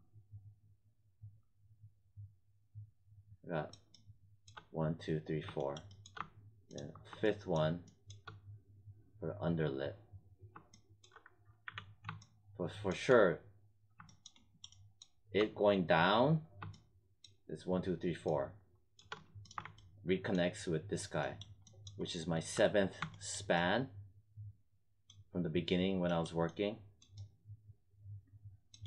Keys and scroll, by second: 11.5 z.